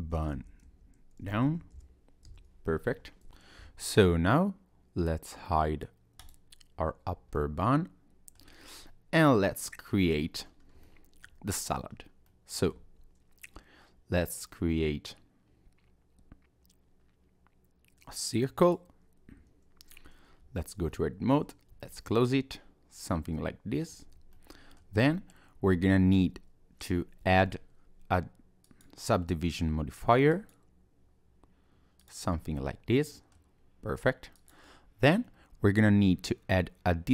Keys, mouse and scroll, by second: 3.3 click, 6.2 click, 7.4 middle click, 8.6-8.9 scroll down 1, 8.9 middle click, 10.2 scroll up 2, 10.6 scroll down 2, 10.8 shift+middle click, 11.6 scroll up 2, 11.9 scroll down 1, 12.3 middle click, 12.8 shift+a, 20.4 Tab, 20.9 middle click, 21.7 f, 22.2 middle click, 24.0 Tab, 24.3 middle click, 28.6 click, 32.0 click, 32.4-32.8 scroll up 1, 32.8-33.1 scroll down 1, 33.1 middle click, 34.4 click.